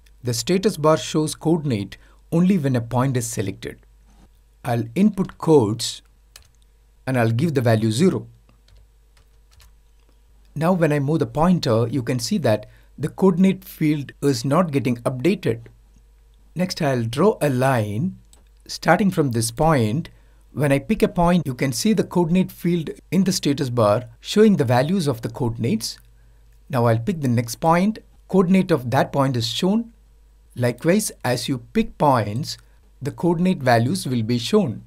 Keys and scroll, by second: 5.9 typing.